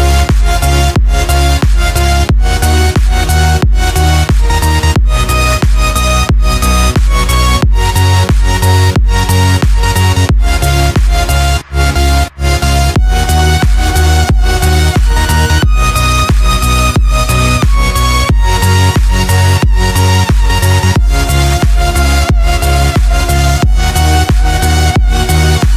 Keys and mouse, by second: 2.6 click, 3.7 click, 5.7 click, 10.8-12.9 drag, 13.9 Tab, 17.5 click, 19.1 click, 24.1-25.4 shift+middle drag.